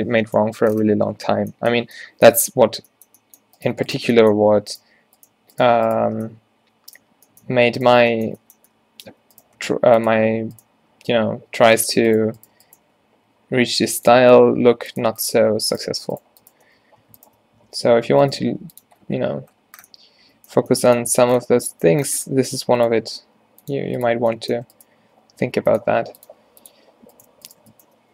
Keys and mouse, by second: 2.7 Tab, 9.6 g, 12.0 a, 13.1-14.3 drag, 13.4 e, 14.6 g, 16.9 z, 17.7 f, 18.0 z, 18.5 g, 19.0 Tab, 21.6 a, 22.5 Tab, 23.3 g, 25.3 e, 26.0 r, 26.4 g, 27.2-28.1 drag, 28.0 f.